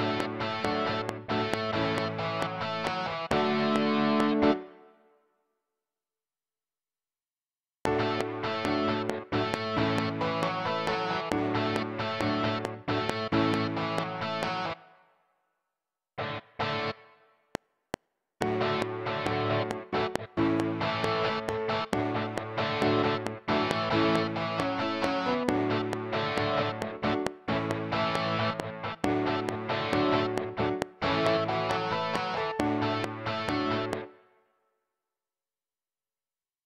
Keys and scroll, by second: 4.5 space, 7.5 space, 14.7 space, 17.4 F7, 34.0 space.